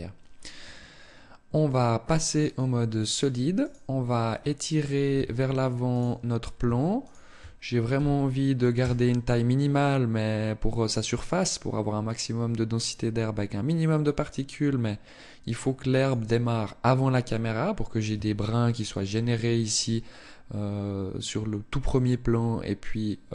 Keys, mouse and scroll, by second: 1.1 click, 3.3 right click, 4.1-4.6 scroll down 1, 4.9 Tab, 5.6 right click, 6.8 shift+right click, 7.5 g, 15.9 click, 17.9 Tab, 23.1 middle click.